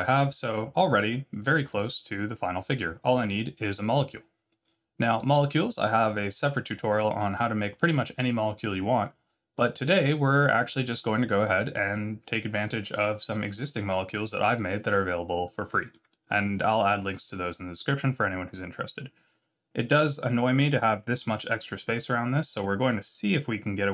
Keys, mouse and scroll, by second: 7.2 click, 7.8 scroll down 2, 8.2 middle click, 15.9 middle click, 16.2 scroll down 3, 16.9 middle click, 18.7 scroll down 1, 21.8 Tab.